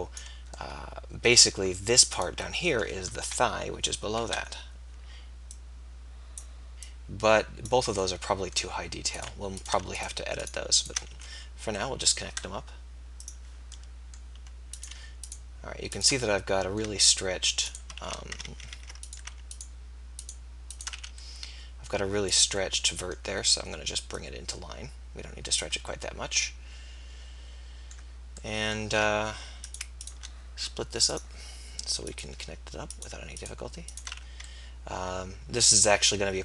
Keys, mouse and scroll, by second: 3.2 KP_3, 4.2 KP_1, 11.4 f, 18.1 f, 18.7 ctrl+z, 20.9 f, 24.1 middle click, 32.9-34.1 right drag, 34.1 f, 35.9-36.4 right drag.